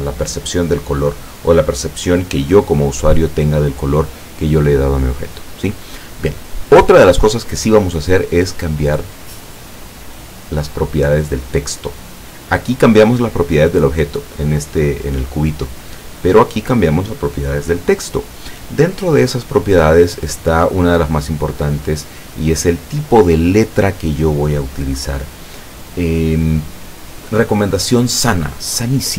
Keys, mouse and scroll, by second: 9.0 click, 14.3 click, 16.8 click, 20.6-21.3 scroll down 1, 24.7 scroll up 1.